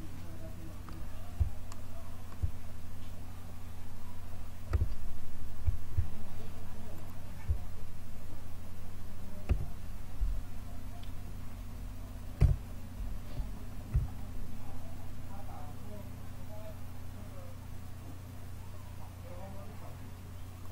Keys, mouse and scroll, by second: 4.6 a, 9.4 o, 12.3 KP_3, 13.8 g.